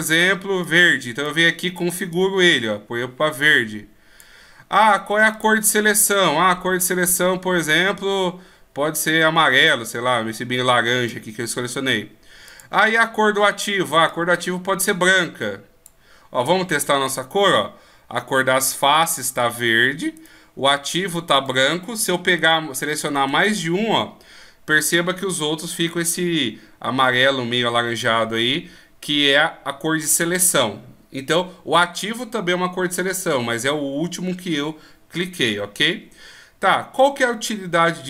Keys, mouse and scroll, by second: 5.3 click, 12.5 click, 18.9 right click, 21.4 right click, 22.4 shift+right click, 23.0 right click, 24.5 shift+right click, 37.0 middle click.